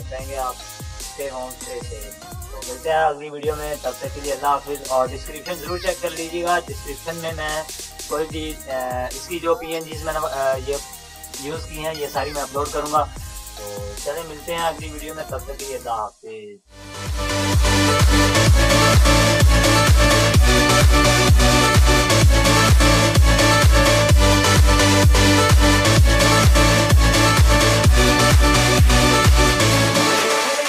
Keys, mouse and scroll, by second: 3.2 ctrl+-, 6.4 ctrl+=, 9.9 ctrl+-, 12.4 ctrl+-, 13.1 ctrl+-, 13.8 ctrl+=, 13.8 ctrl+-, 16.8 click.